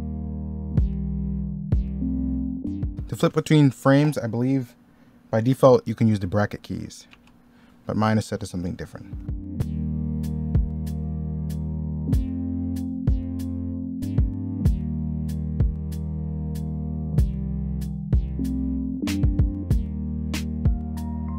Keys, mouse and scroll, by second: 0.1 ctrl+z, 0.8 ctrl+z, 1.2 ctrl+z, 2.8 z, 8.6 middle click, 9.3-11.1 typing, 11.2 middle click, 12.0 ctrl+z, 12.5-17.9 typing, 12.9 middle click, 13.7 ctrl+z, 14.4 ctrl+z, 14.9 ctrl+z, 18.4 ctrl+z, 18.9 ctrl+z, 19.1 ctrl+z, 19.8-21.3 typing, 20.4 ctrl+z.